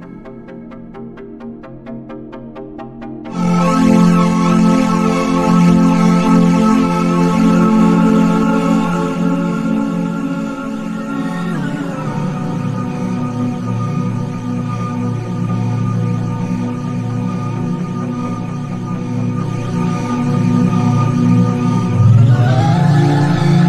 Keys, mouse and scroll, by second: 0.5 click, 0.9-5.4 drag, 6.8-10.7 drag, 10.8 click, 10.9-18.4 drag, 18.5-20.8 drag, 21.1-23.5 drag.